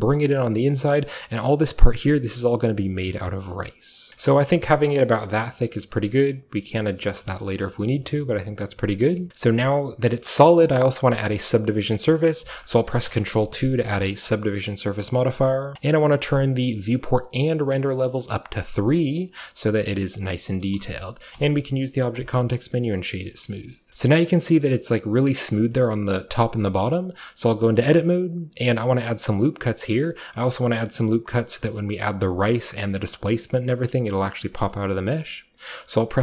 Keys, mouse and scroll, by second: 0.9-4.0 shift+middle drag, 4.0 shift+click, 4.1 Return, 4.1-4.5 scroll down 1, 4.1 BackSpace, 4.1 7, 4.2-5.3 middle drag, 4.2 a, 4.5-5.1 scroll up 1, 5.1 scroll up 1, 5.1 scroll down 1, 6.9 middle drag, 7.3 shift+middle click, 7.7 shift+middle click, 7.9 shift+middle click, 8.2 shift+middle drag, 8.7-10.3 shift+middle drag, 8.7-9.3 shift+scroll up 1, 9.3 Tab, 10.4-12.6 middle drag, 12.6-14.0 ctrl+scroll up 1, 12.9 ctrl+2, 13.2-15.7 ctrl+middle drag, 14.0 ctrl+scroll up 1, 14.1-15.7 ctrl+scroll down 1, 16.3-17.2 scroll down 1, 17.2-20.2 drag, 17.2-20.2 scroll down 1, 20.7 middle drag, 21.0-22.2 shift+middle drag, 22.2-23.2 shift+drag, 23.4-24.5 shift+scroll up 3, 23.8 middle drag, 23.9 Tab, 24.0-24.6 middle drag, 24.5-25.7 scroll down 1, 24.8-25.7 middle drag, 27.3 Tab, 27.8-32.0 middle drag, 28.8-29.9 scroll up 1, 29.9-32.0 scroll up 1, 34.6-36.2 middle drag.